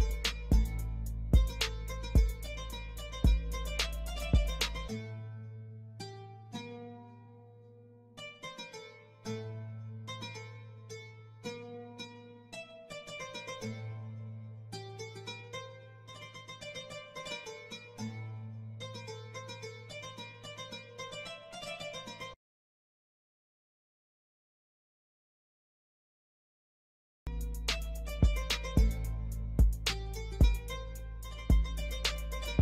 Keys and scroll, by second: 3.2 ctrl+z, 3.6 Escape, 6.5 ctrl+z, 10.5 ctrl+r, 11.6 F2, 19.4 space, 20.6 r, 21.6 Escape.